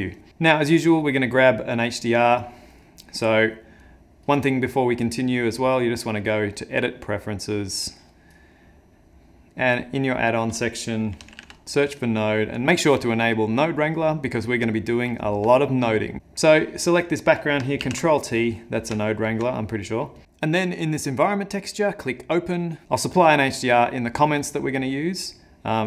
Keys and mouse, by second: 0.9 click, 2.8 middle click, 3.8 click, 5.4 click, 16.2 ctrl+middle click, 16.6 click, 17.8 ctrl+t, 18.6 middle click, 19.0 ctrl+middle click, 20.2 click, 20.4 click, 22.5 click.